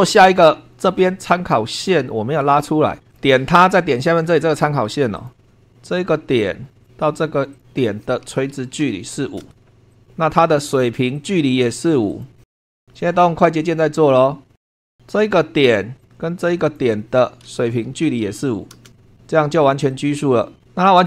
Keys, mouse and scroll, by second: 3.1 click, 5.1 click, 5.5 Escape, 6.8 click, 7.5 click, 8.8 i, 9.1 5, 9.4 Return, 9.9 click, 10.2-10.5 scroll up 2, 11.1 click, 12.1 click, 12.6 l, 12.7 Return, 14.2 click, 14.6 scroll down 2, 14.7 shift+middle click, 16.0 click, 16.6 click, 17.8 l, 18.2 5, 18.8 Return, 19.9 click.